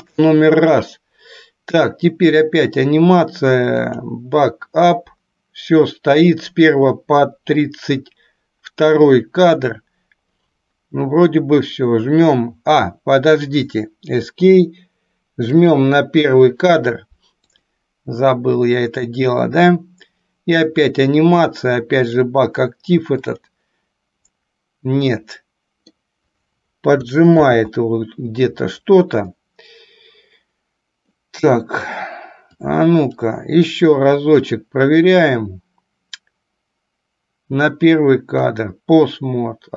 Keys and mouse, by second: 15.8 click, 17.5-24.2 drag, 25.3 middle click, 27.5 ctrl+z, 29.5-31.3 middle drag, 32.7-33.4 drag, 38.5-39.7 drag.